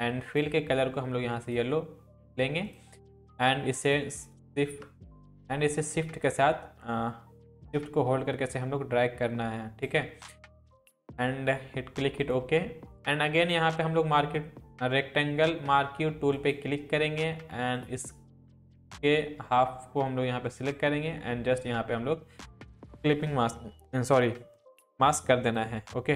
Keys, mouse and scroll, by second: 6.0-10.0 drag, 16.4-20.9 drag.